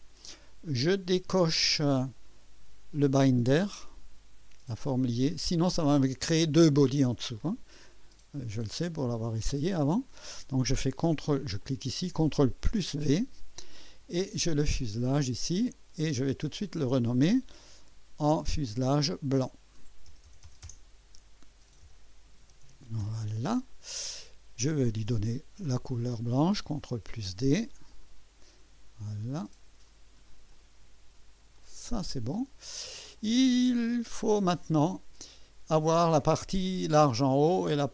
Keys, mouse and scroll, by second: 0.8-2.3 drag, 4.9 click, 9.1 click, 11.6 ctrl+click, 12.6 ctrl+v, 14.8 click, 15.6 click, 16.5 click, 18.0 F2, 18.9 click, 20.1-23.3 typing, 26.7 ctrl+d, 27.9 click, 29.4 click, 30.5 click, 31.6 click, 32.3 click, 33.2-35.2 drag, 36.1 click.